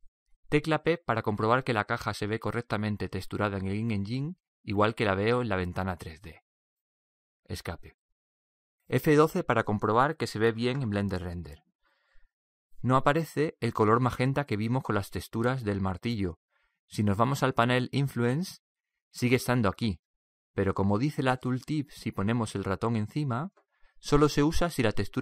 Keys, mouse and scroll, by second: 3.1-4.8 middle drag, 4.4 p, 6.2 p, 7.1-9.0 middle drag, 17.5-25.2 drag.